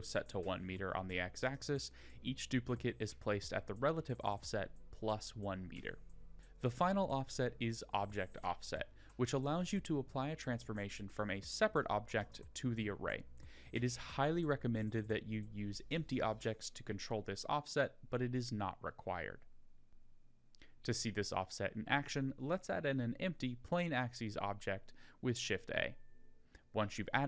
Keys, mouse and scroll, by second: 19.9 middle click, 19.9 shift+a, 26.6 click.